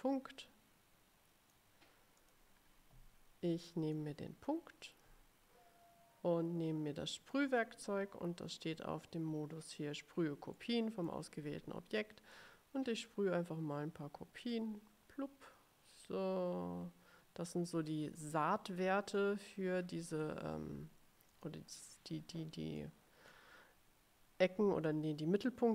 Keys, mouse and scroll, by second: 0.5-1.9 drag, 2.3 click, 4.1 click, 7.3 click, 10.7 click, 14.6-18.0 drag, 18.3 click, 19.3-20.6 drag, 21.4 click, 22.9 click, 25.0-25.7 drag.